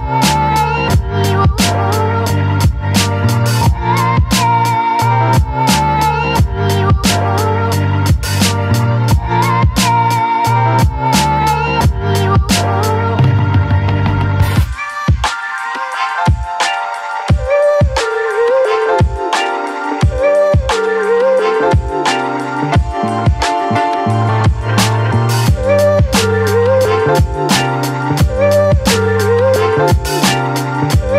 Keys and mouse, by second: 0.0 ], 0.1 ], 0.2 click, 0.7-1.7 drag, 3.1 ctrl+i, 3.7 b, 4.2 b, 4.6 b, 5.1 b, 6.4 b, 6.9 b, 9.2 b, 10.2 b, 11.7-21.5 typing, 22.7 b, 24.1 b, 25.1 b, 25.8 b, 28.0 click, 29.6 click, 30.7 click.